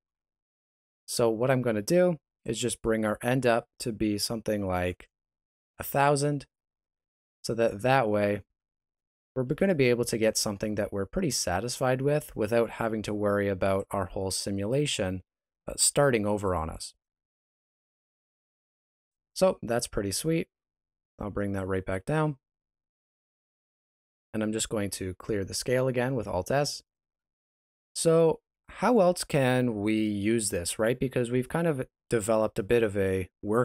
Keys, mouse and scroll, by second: 21.9 click, 23.5-24.3 scroll up 2, 25.1 alt+s, 27.1-27.6 scroll down 1, 27.6 middle click, 28.6 shift+middle click.